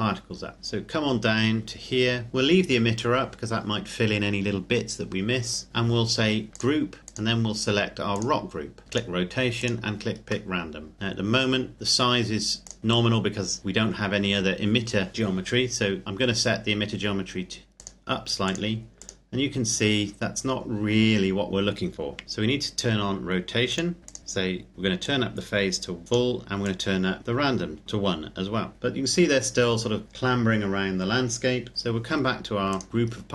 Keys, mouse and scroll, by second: 0.6 scroll down 1, 6.5 click, 8.9 click, 10.5 middle click, 10.9-12.6 scroll up 1, 12.6 click, 17.8 click, 20.1-22.2 scroll down 1, 23.7 click, 25.0 click, 28.8-30.3 scroll down 1, 32.7 click, 32.9-33.3 scroll down 1.